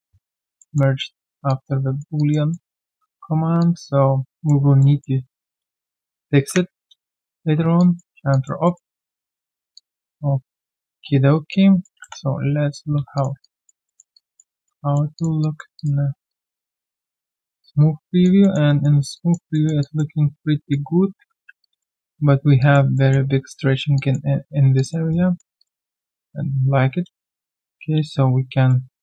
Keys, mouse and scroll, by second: 0.6 alt+middle click, 1.1-1.4 alt+scroll down 1, 1.5 alt+click, 1.8 alt+right click, 2.2 alt+click, 2.5 alt+middle click, 2.8 alt+click, 4.8 alt+middle click, 8.3 alt+click, 8.6 alt+middle click, 9.7 alt+click, 11.5 alt+click, 12.4 right click, 12.8 scroll down 1, 12.9 q, 13.4 alt+click, 13.8 alt+middle click, 14.1 alt+click, 14.5 alt+right click, 14.8 alt+middle click, 15.4 alt+click, 15.7 alt+click, 16.0 alt+scroll down 1, 16.3 alt+click, 17.1 alt+right click, 17.3 alt+click, 18.4 alt+middle click, 18.7 alt+right click, 19.1 alt+click, 19.5 alt+middle click, 19.8 alt+click, 20.3 alt+right click, 21.6 alt+click, 22.0 alt+middle click, 22.6 alt+click, 22.9 alt+middle click, 23.6 alt+right click, 23.9 alt+click, 24.7 alt+click, 25.1 alt+right click, 25.9 shift+click, 26.1 shift+double click, 28.0 ctrl+alt+q.